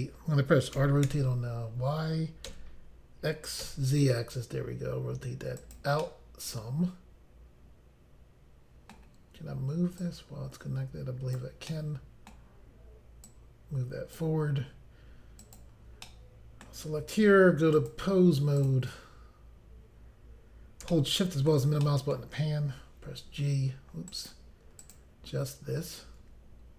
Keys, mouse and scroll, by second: 0.8 r, 3.6 x, 3.6 z, 5.6 click, 5.8 click, 6.0 middle click, 10.0 click, 11.7 middle click, 13.3 click, 15.4 click, 15.6 click, 16.1 middle click, 17.8 click, 17.9 click, 18.6 click, 18.7 click, 20.9 shift+middle click, 21.9 middle click, 23.1 g, 24.1 right click, 24.8 click, 26.3 g.